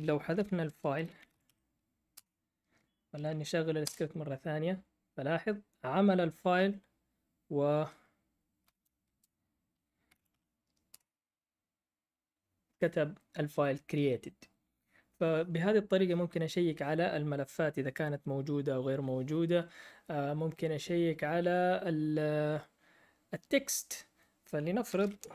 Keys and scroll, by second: 0.0-2.1 typing, 3.8 Up, 8.6-10.5 typing, 10.9 Return, 14.2 typing.